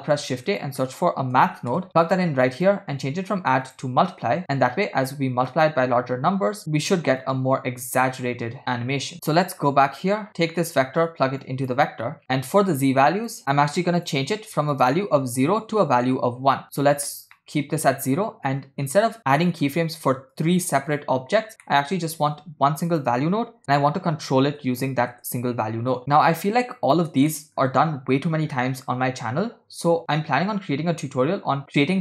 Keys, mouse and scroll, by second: 0.0 shift+a, 2.6-3.9 drag, 4.8-6.6 drag, 6.6 middle click, 7.2-9.1 drag, 9.1 middle click, 9.1 scroll up 3, 9.7 scroll down 2, 9.9 middle click, 10.3-11.0 scroll up 1, 11.1 click, 12.6-14.1 drag, 14.8-16.0 drag, 16.7 middle click, 17.1-17.6 scroll up 4, 19.1 scroll down 5, 19.5 middle click, 20.4 click, 21.7 middle click, 22.4 shift+a, 26.0-26.8 scroll down 4, 26.8 click, 27.4 middle click, 28.4 scroll down 1, 28.7 middle drag.